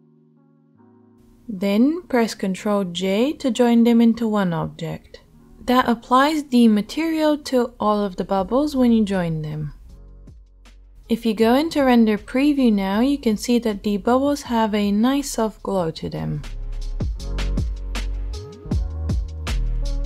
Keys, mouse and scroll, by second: 0.3 shift+middle click, 0.4 shift+right click, 1.1 shift+middle click, 1.2-1.6 shift+right drag, 1.6 shift+middle drag, 1.8-7.8 right drag, 3.7 ctrl+j, 7.8-11.1 middle drag, 11.1-20.0 shift+right drag.